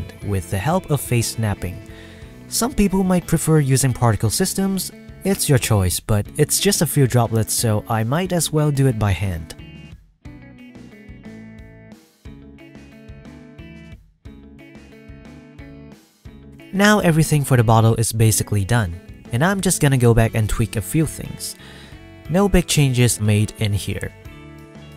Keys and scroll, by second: 0.2 Tab, 0.5 s, 0.9 g, 2.4 shift+d, 2.8 shift+d, 2.9 Tab, 4.1 Tab, 4.1-9.3 typing, 8.2 Tab, 10.8 ctrl+s, 13.0 F12.